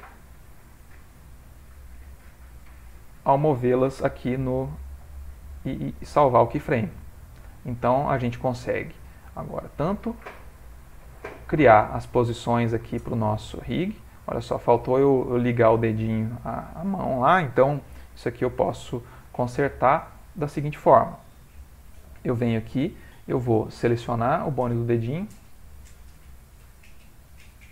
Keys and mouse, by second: 0.3 click, 1.9 click, 4.4 i, 5.8 click, 9.4 click, 10.2 g, 14.1 click, 14.1 g, 17.6 middle click, 18.2 middle click, 18.8 ctrl+middle click, 19.4 shift+middle click, 20.2 ctrl+middle click, 21.6 middle click, 24.4 click, 25.9 middle click, 26.6 middle click.